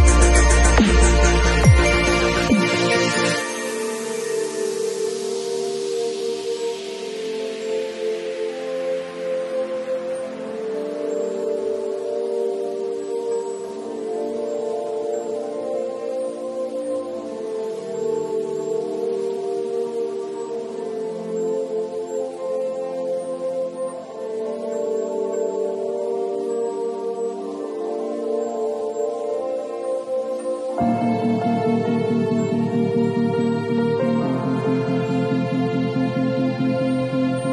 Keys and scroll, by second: 8.4 space, 30.2 super+[, 37.3 [.